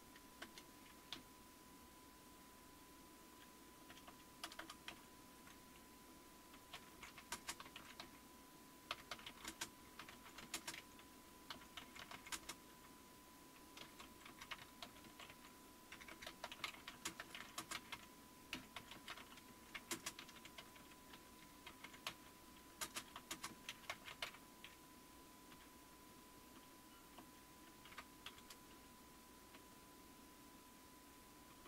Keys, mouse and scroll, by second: 0.0-5.4 typing, 6.7-24.2 typing, 25.3-31.6 typing.